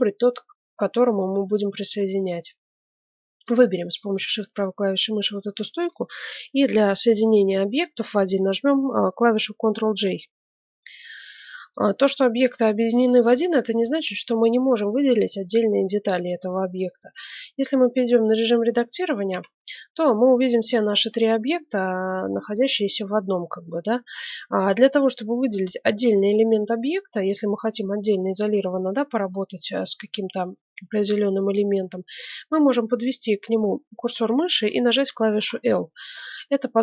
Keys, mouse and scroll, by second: 3.4-5.2 right drag, 9.8 ctrl+j, 11.0 middle click, 16.9 middle click, 17.2 Tab, 19.3 a, 19.7-21.4 middle drag, 21.4 click, 21.5-25.4 middle drag, 32.2-34.0 middle drag, 35.3 l.